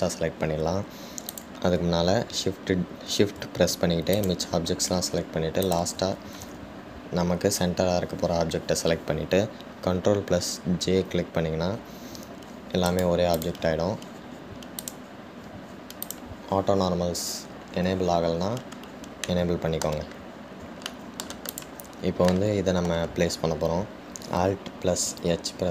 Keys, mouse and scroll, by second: 2.5 click, 5.3 shift+click, 6.8 shift+click, 16.0 click, 17.2 click, 20.4-21.5 middle drag, 21.5-22.1 scroll down 1, 22.1-22.7 shift+middle drag, 22.7 click, 23.5-25.7 middle drag.